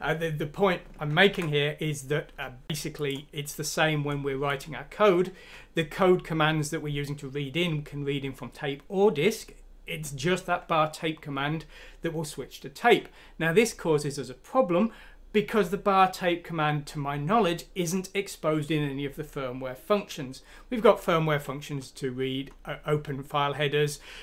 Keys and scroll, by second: 1.1 ctrl+F9.